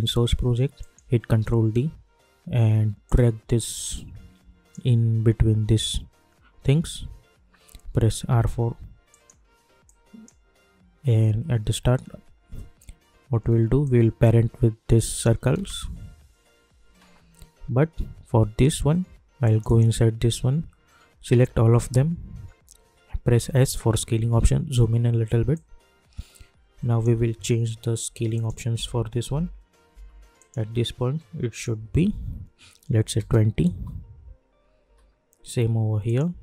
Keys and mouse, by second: 1.3 ctrl+d, 3.0-7.1 drag, 7.7 u, 8.3 y, 9.1-12.6 drag, 13.8-15.5 drag, 15.5 space, 19.4 click, 21.3 ctrl+a, 23.4 s, 24.4 =, 24.6 =, 24.8 =, 25.5-27.5 drag, 27.5 =, 27.6 =, 28.3 click, 28.7 j, 29.2 j, 29.9 k, 30.3 click, 33.7 Return, 34.8 k, 36.0 click.